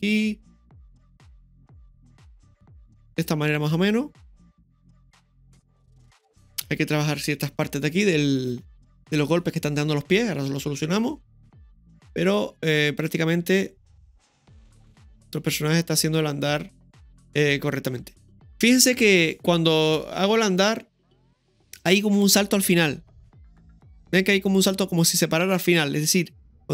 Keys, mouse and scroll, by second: 0.5 r, 1.6 g, 6.0 click, 6.0 space, 10.9 scroll down 1, 13.0 click, 13.0-16.2 scroll down 1, 26.0 space.